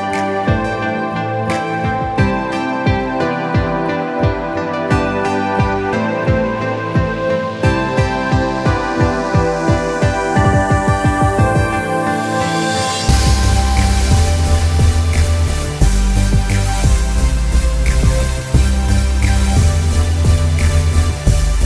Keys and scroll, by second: 0.5 ctrl+alt+z, 2.7 space, 6.0 space, 7.7 b, 14.4 space, 18.0 space.